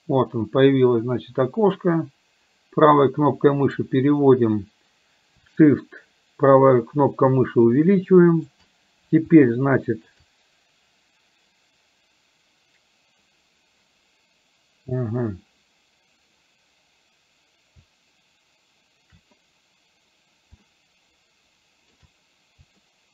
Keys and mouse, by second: 1.9-3.9 right drag, 6.2-8.5 shift+right drag, 20.7-22.0 shift+middle drag, 22.9 shift+middle click.